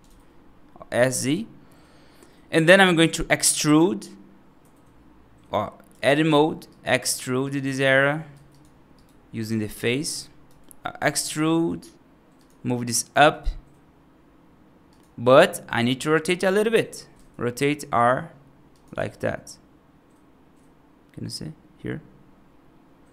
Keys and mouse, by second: 2.1-2.5 middle drag, 4.5 F3, 6.6 right click, 7.3 click, 8.2 3, 8.4 click, 8.8 right click, 9.8 alt+right click, 10.8 e, 13.0 g, 17.0 r, 18.8 g.